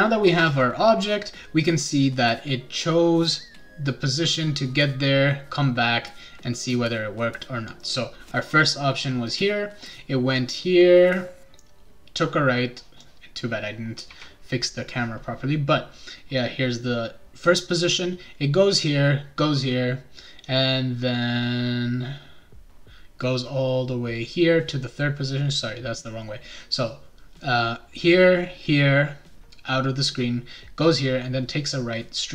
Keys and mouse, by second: 13.0 click.